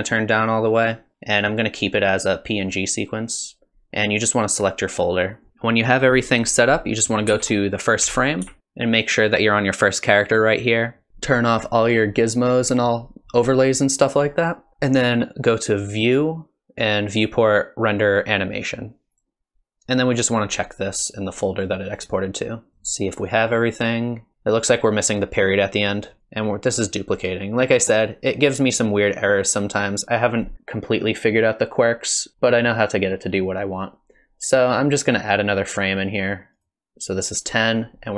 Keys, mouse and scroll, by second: 5.3 click, 7.3 shift+Left, 8.0 Left, 8.4 Left, 11.9 click, 12.7 click, 15.8 click, 36.8 click.